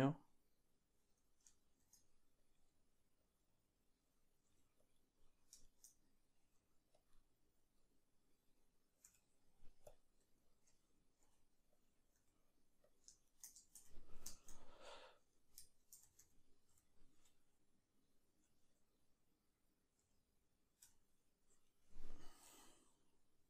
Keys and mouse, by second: 1.8 shift+d, 2.6 s, 3.4-12.2 middle drag, 4.5 g, 6.4 g, 9.9 q, 10.3 q, 11.2 r, 12.2 g, 13.3 shift+right click, 13.6-15.7 ctrl+shift+middle drag, 13.8 right click, 15.7 right click, 15.8-23.4 middle drag, 15.8 shift+d, 20.0 g.